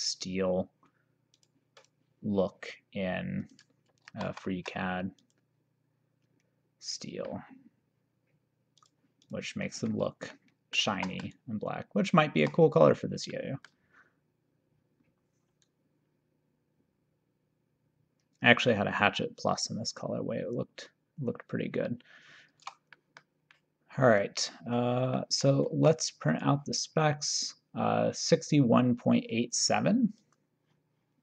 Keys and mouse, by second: 1.3 click, 3.5 click, 4.4 ctrl+d, 5.3 click, 7.0 click, 8.9 click, 11.1 ctrl+s, 12.1 shift+right click, 13.4 middle click, 15.7 shift+right click, 23.0 middle click, 25.2 middle click, 25.9 ctrl+s, 26.3 click, 30.2 click.